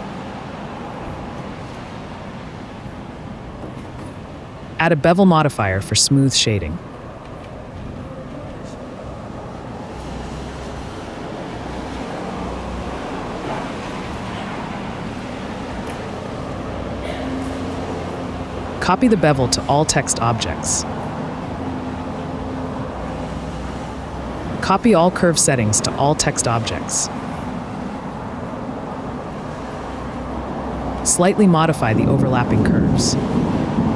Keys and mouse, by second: 1.1-1.7 right drag, 2.0 middle click, 5.3-6.7 drag, 7.6 click, 8.2 click, 9.2-10.2 drag, 11.2 middle drag, 12.9 click, 13.7-16.7 drag, 19.5-20.0 drag, 20.0-20.5 middle drag, 21.9 middle click, 22.6 a, 25.0-26.6 drag, 26.9-27.8 drag, 28.9-29.6 drag, 30.4-31.0 drag, 31.8 Tab, 32.4 x, 32.7 g, 32.9 y.